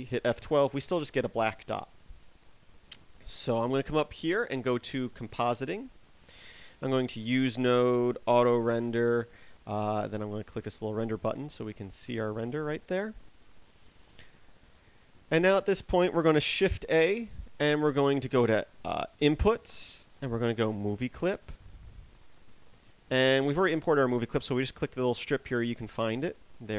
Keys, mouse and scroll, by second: 5.7 click, 7.4 click, 12.1 click, 12.1 scroll down 7.